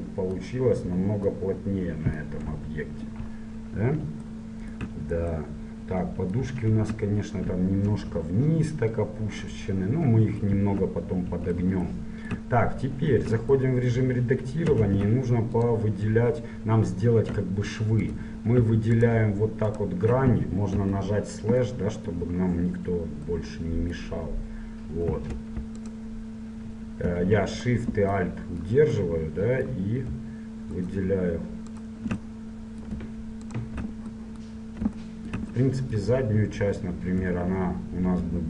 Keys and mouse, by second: 2.6 KP_1, 4.3 middle click, 6.8 Tab, 8.0 KP_1, 13.1 Tab, 14.9 ctrl+Tab, 18.2-21.4 right drag, 20.8 KP_Divide, 21.4 middle click, 32.8-34.2 middle drag, 34.4-38.4 middle drag.